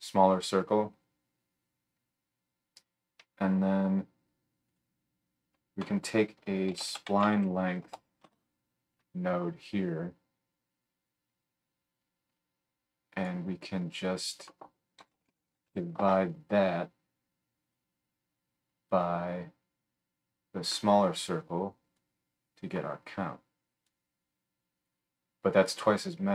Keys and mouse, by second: 4.7-9.8 drag, 5.8 F3, 9.8-14.0 right drag, 14.0-17.7 middle drag, 17.7-19.0 right drag, 19.0-26.3 middle drag.